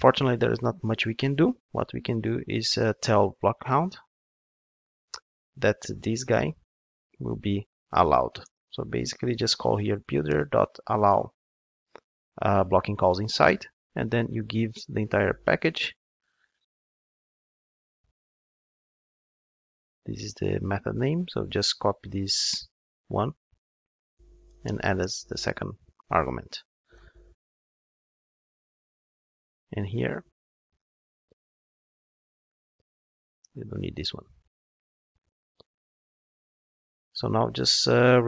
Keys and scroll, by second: 5.9 Return, 16.4 super+v, 19.1 alt+shift+Left, 23.4 super+x, 25.1 super+v, 26.9 alt+super+l, 36.3 super+1.